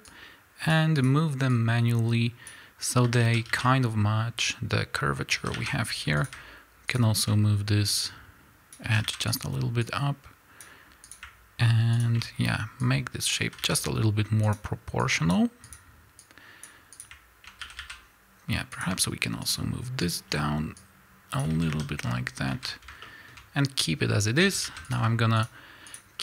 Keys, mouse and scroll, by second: 0.0 click, 1.4-6.2 drag, 3.0 a, 3.6-4.9 scroll down 1, 5.3 a, 6.9 shift+click, 7.8-9.3 drag, 8.8 a, 9.8-11.0 drag, 11.9 shift+click, 12.8-14.4 drag, 13.4 a, 14.9 click, 16.2-17.5 drag, 17.5 a, 18.7 click, 19.4 shift+click, 20.7-23.0 drag, 21.5 a, 22.0 scroll down 1, 22.4 a, 23.0-24.9 shift+middle drag, 24.3 a, 24.9 click, 25.3 shift+click, 26.1-26.2 shift+middle drag.